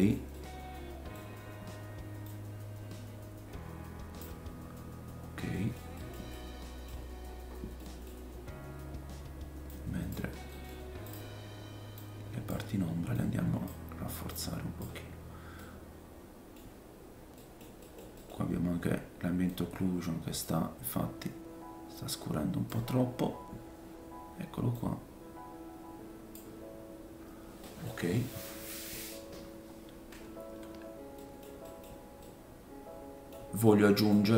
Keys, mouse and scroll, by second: 1.2-2.0 scroll up 2, 2.0 scroll up 1, 2.2 click, 4.4-5.3 scroll down 5, 5.5 middle click, 5.9 middle click, 6.3 middle click, 7.3-11.1 middle drag, 7.4-7.8 scroll up 1, 8.1-9.4 scroll up 5, 9.7 click, 11.1-15.4 drag, 11.9-17.1 middle drag, 11.9-15.4 right drag, 15.3 scroll down 1, 16.8-17.4 scroll down 3, 17.8 middle click, 19.4 click, 23.0-24.7 scroll up 5, 24.7 click, 26.8-27.6 scroll down 3, 27.6 middle click, 28.0-28.4 scroll up 1, 29.1-30.3 scroll up 1, 30.3-31.0 scroll down 3, 31.2 middle click, 31.6 middle click, 32.2 middle click, 33.7 middle click.